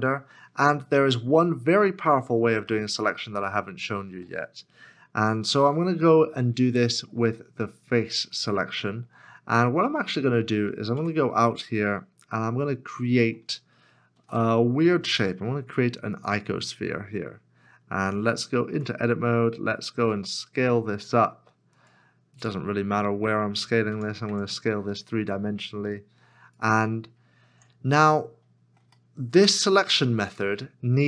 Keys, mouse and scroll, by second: 0.1 scroll down 1, 1.4 shift+middle click, 3.4 middle click, 4.2 shift+middle click, 9.5 shift+middle click, 10.2-10.7 scroll down 1, 10.9 Tab, 13.0 shift+right click, 14.2 shift+a, 18.7 Tab, 23.9 s, 23.9 Tab, 24.3 Tab, 27.5 Tab, 28.1 middle click, 29.7 Tab.